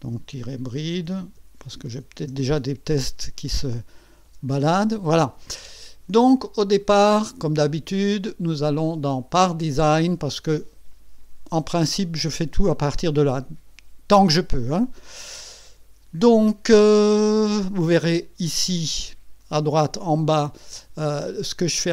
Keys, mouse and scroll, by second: 0.1-2.7 typing, 4.3 Return, 6.5 click, 8.2 click, 9.1 click, 21.6 click.